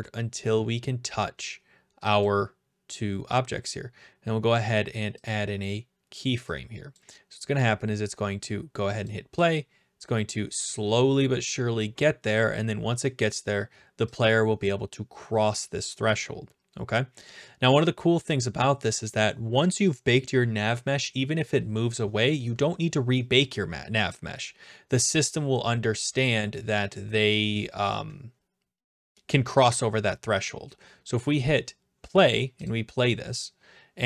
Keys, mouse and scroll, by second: 2.2 click, 5.3-6.3 drag, 7.0-8.1 drag, 9.0-10.1 drag, 14.2-15.2 drag, 32.7 click.